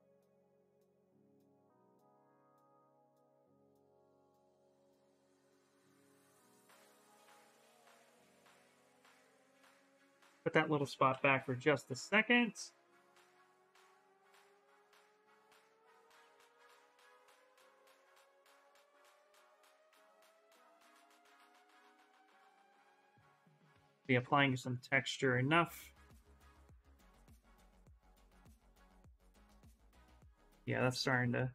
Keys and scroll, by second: 10.6-13.6 typing, 17.0 s, 18.9 s.